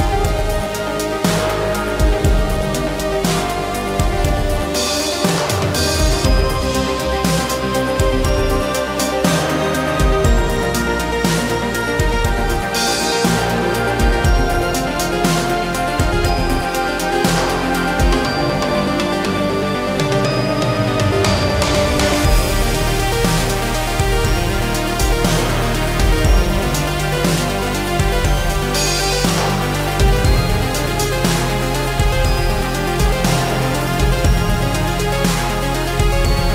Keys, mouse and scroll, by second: 11.0 ctrl+z.